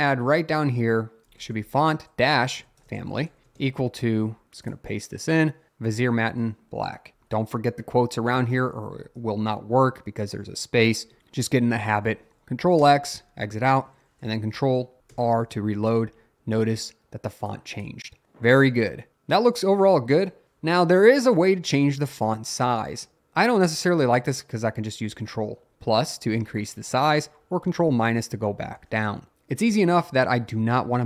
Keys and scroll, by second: 1.2-4.0 typing, 5.7 Right, 7.1 shift+", 7.4 Right, 9.0 shift+", 11.1 Escape, 11.2 shift+:, 11.9 x, 12.8 Return, 15.1 ctrl+r, 25.7 ctrl+=, 27.4 ctrl+-.